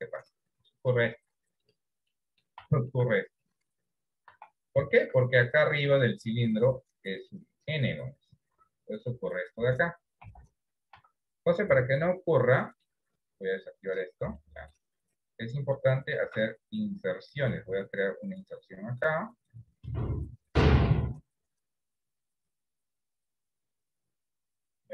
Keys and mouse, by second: 0.9 click, 2.3 middle click, 2.9 shift+middle click, 4.5 Tab, 4.9 shift+middle click, 5.5 middle click, 7.3 click, 10.3 KP_1, 11.1 KP_3, 12.4 middle click, 14.5 shift+middle click.